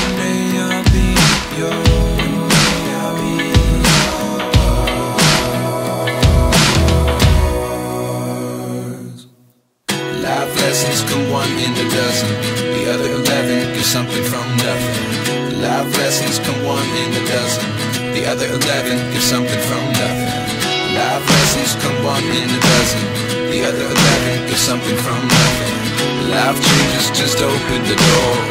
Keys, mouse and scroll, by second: 6.2 Return.